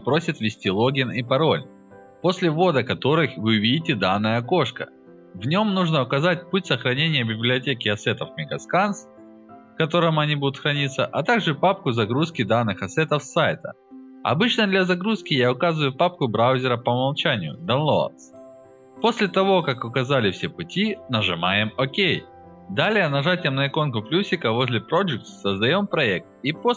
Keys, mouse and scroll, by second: 4.7 click, 6.2 click, 7.2 click, 7.3 right click, 8.0 click, 12.0 drag, 13.8 click, 17.4 drag, 19.3 click, 24.3 click, 26.6 Return.